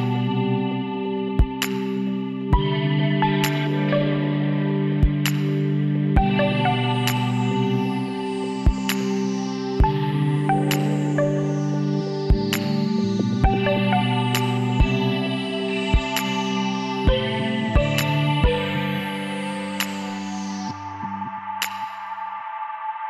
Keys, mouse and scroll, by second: 9.3 ctrl+z, 10.0 middle click, 17.1-20.4 middle drag, 20.4-21.9 drag, 21.5 right click, 21.9 KP_1.